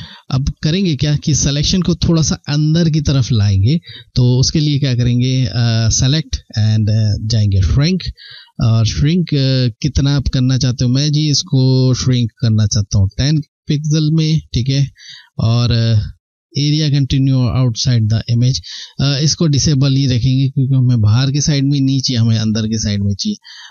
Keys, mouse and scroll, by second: 0.1 ctrl+scroll, 5.4 click.